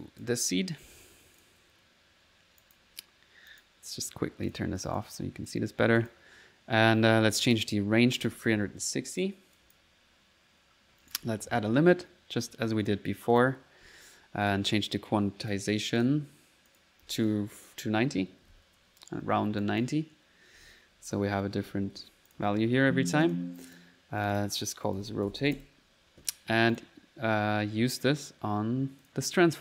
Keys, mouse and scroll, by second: 1.4 click, 2.7 click, 3.6 click, 4.5 click, 4.9 click, 5.2 click, 5.8 middle click, 6.0 click, 7.5 click, 9.6 click, 10.0 click, 11.1 right click, 11.4-12.1 typing, 12.9 click, 13.4 click, 14.5 click, 15.5 click, 16.0 click, 16.7 click, 19.7 click, 20.4-22.8 typing, 22.3 click, 23.3 alt+click, 23.7 alt+click, 24.0 alt+click, 26.8 click, 28.3 click, 29.1-29.6 drag.